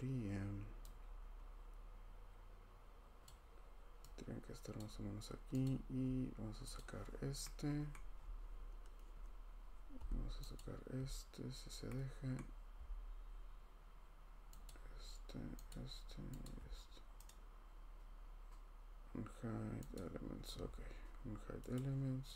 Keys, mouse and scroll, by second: 3.2 click, 3.3 scroll, 5.6 click, 6.0 scroll, 6.7 click, 7.9-8.2 scroll, 10.6 ctrl+click, 12.3 scroll, 14.6 ctrl+click, 15.4 scroll, 15.7 ctrl+click, 16.4 ctrl+click, 17.2 right click, 19.9 click, 21.7 click.